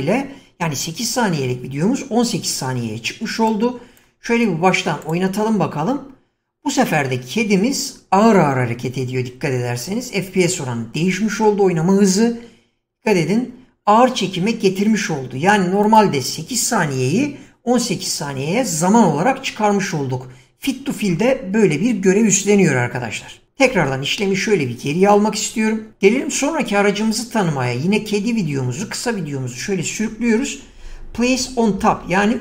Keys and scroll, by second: 23.7 ctrl+z.